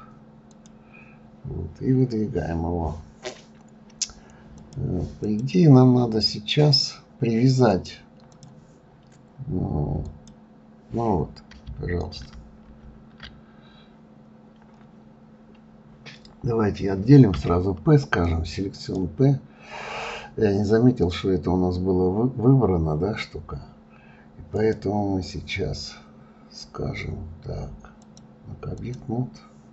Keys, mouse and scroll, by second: 1.1-2.3 scroll down 6, 4.6 click, 7.7-10.2 drag, 12.2 ctrl+z, 12.6 ctrl+z, 15.2-16.2 scroll up 3, 17.3 p, 24.5 click, 28.0-29.7 drag.